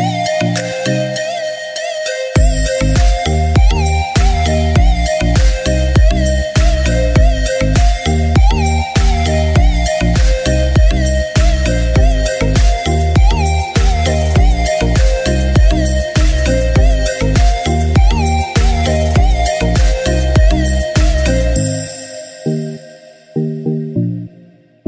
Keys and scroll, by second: 0.2 ctrl+z, 1.1 ctrl+z.